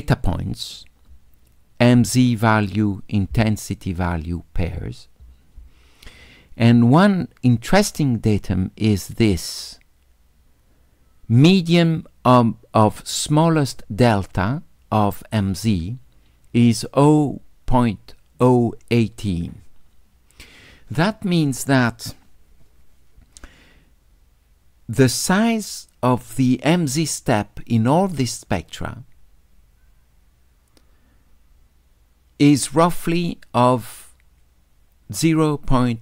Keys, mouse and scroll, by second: 9.6-11.7 drag.